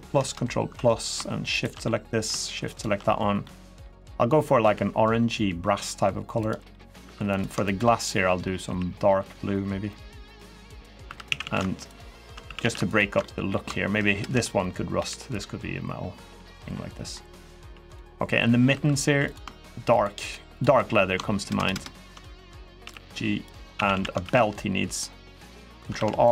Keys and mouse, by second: 0.6 ctrl+KP_Add, 1.3 shift+click, 1.6 middle click, 2.5 shift+click, 3.2 middle click, 4.4 g, 6.2 click, 6.5 middle click, 6.8 3, 7.1 click, 7.4 shift+click, 8.4 g, 10.0 click, 10.4 middle click, 10.8 3, 11.0 a, 11.2 a, 11.7 alt+shift+click, 12.4 a, 12.6 alt+shift+click, 13.0 middle click, 13.9 ctrl+KP_Add, 14.7 g, 16.0 click, 16.4 middle click, 17.1 middle click, 18.1 middle click, 18.5 3, 19.7 shift+click, 20.0 shift+click, 20.5 middle click, 21.2 ctrl+KP_Add, 21.4 ctrl+KP_Add, 21.5 ctrl+KP_Add, 22.6 g, 23.2 click, 23.5 a, 23.7 a, 24.0 ctrl+r, 25.5 click, 26.1 ctrl+r.